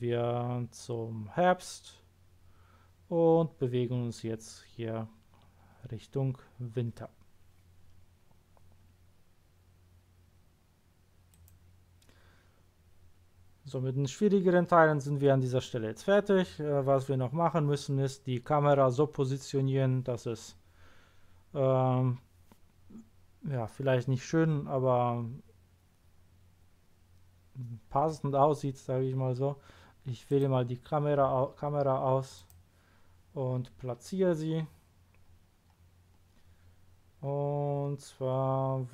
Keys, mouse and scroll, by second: 11.3 click, 30.3 click, 32.3 click, 33.6-34.1 scroll up 1, 34.6-35.0 scroll up 1, 35.2-36.1 scroll up 2.